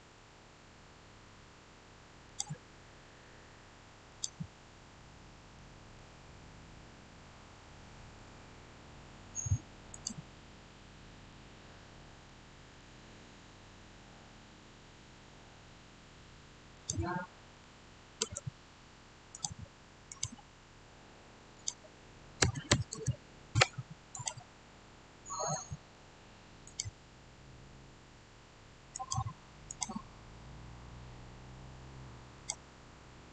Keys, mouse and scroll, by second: 2.1 click, 2.2 click, 4.9-9.8 middle drag, 9.8 click, 10.6 scroll down 1, 10.7-13.0 middle drag, 13.0 scroll up 1, 16.6 click, 18.1 Return, 19.2 click, 22.1-23.3 typing, 24.0 click, 24.6 scroll down 1, 25.4 middle click, 26.5 click, 28.8 click, 32.2 click, 32.3 click.